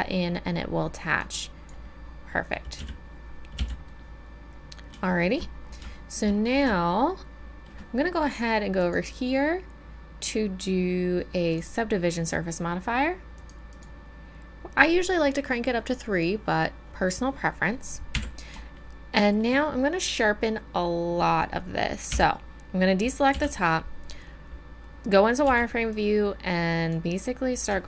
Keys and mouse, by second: 2.0-3.2 drag, 2.7 z, 3.5 z, 8.8-11.6 drag, 11.6-13.4 middle drag, 13.4-18.1 drag, 18.1 KP_1, 22.1 a, 23.3 z, 25.4 b.